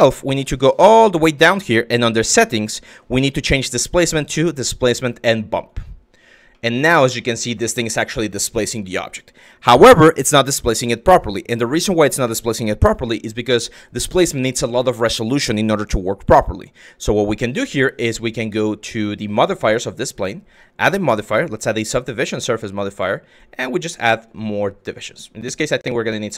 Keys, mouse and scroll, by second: 1.6 click, 3.4-5.6 drag, 6.2-7.2 middle drag, 20.2-21.5 drag, 22.9 click, 23.4 click, 24.0 click, 25.0 click.